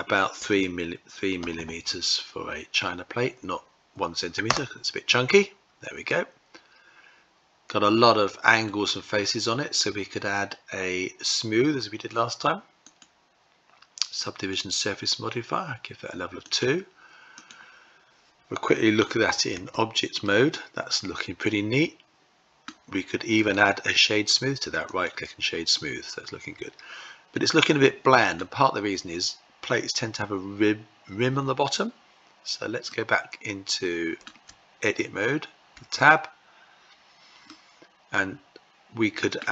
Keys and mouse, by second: 1.2 m, 5.7-8.3 middle drag, 12.6-14.2 drag, 16.1 click, 16.9 click, 19.2 Tab, 19.8-22.2 middle drag, 23.0 right click, 25.4-27.9 middle drag, 32.5-33.8 middle drag, 35.3 Tab, 37.1-39.0 middle drag.